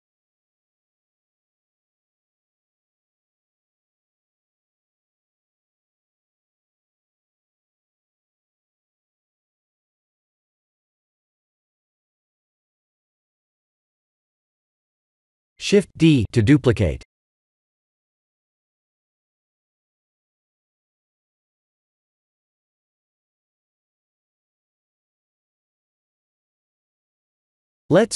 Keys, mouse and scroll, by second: 0.3 Tab, 0.7 middle click, 1.5 Tab, 1.9-2.2 scroll down 7, 2.7 middle click, 2.8 middle click, 2.9 middle click, 3.1 middle click, 3.5 middle click, 6.5 middle click, 6.8 middle click, 9.8 click, 10.8 middle click, 11.3 s, 14.7 middle click, 15.0 middle click, 16.5 shift+d, 20.6 click, 20.9 middle click, 21.0 middle click, 21.9 Tab, 23.1 3, 23.7 click, 24.4 scroll up 2, 26.9 click, 27.4 Tab.